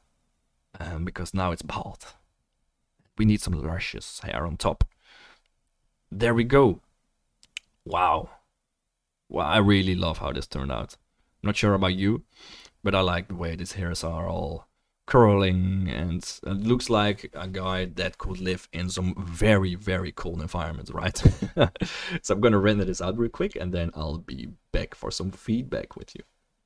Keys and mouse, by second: 3.9-7.7 drag, 7.9 click.